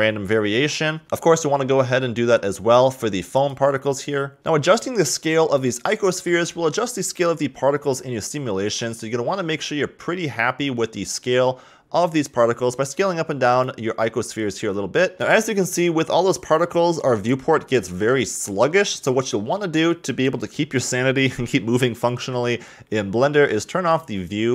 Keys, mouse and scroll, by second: 1.5 click, 1.9-3.0 drag, 3.4-4.4 drag, 5.2 click, 5.9 shift+click, 10.7 s, 15.1 middle drag, 15.7-19.0 middle drag, 19.3 click.